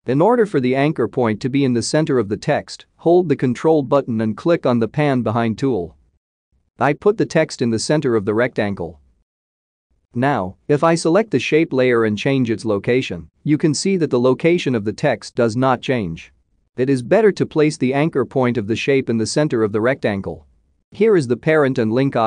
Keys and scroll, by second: 15.9 ctrl+z.